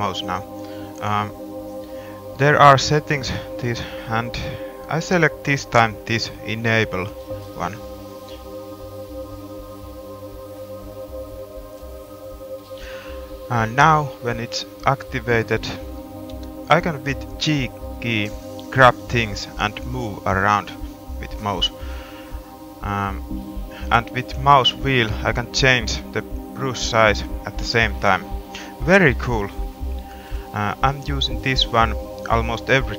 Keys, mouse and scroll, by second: 12.2-13.9 middle drag, 16.2 g, 17.6-17.9 scroll up 2, 21.2 middle click, 31.9 middle click.